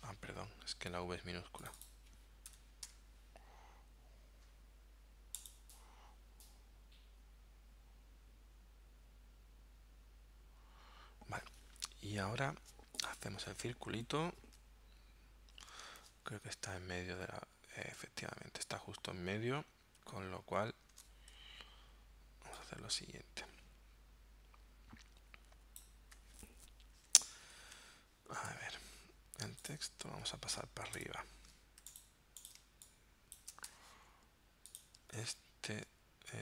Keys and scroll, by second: 2.5 BackSpace, 2.9 v, 14.0 l, 16.0 super+Tab, 21.0 super+Tab, 27.7 shift+x, 28.6 v, 31.0 shift+super+0, 31.8 z, 32.6 space, 33.7 v, 35.2 super+Tab.